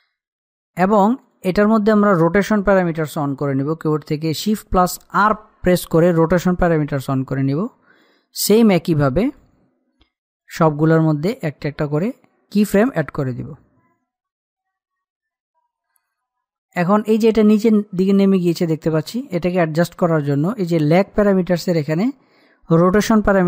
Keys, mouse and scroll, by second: 1.8 click, 5.8 shift+r, 7.8 click.